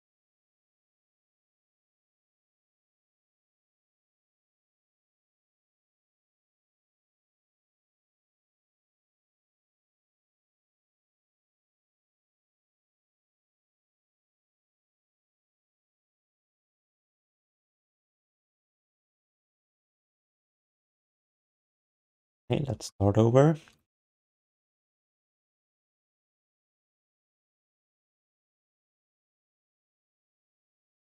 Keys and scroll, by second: 2.5 alt+shift+d, 3.0 ctrl+s, 4.4-6.4 typing, 8.9 s, 17.9 ctrl+s, 18.5 alt+shift+d, 18.8 ctrl+s, 21.4 alt+q, 21.8 alt+q.